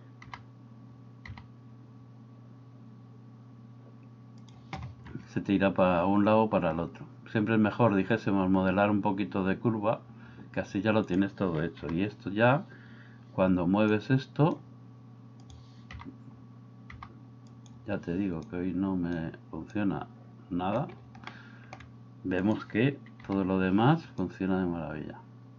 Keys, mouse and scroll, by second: 0.3 g, 11.9 g, 13.9 click, 16.0 g, 17.0 g, 18.5 click, 19.9 click, 21.3-21.8 shift+middle drag, 23.3 g, 24.2-25.5 drag.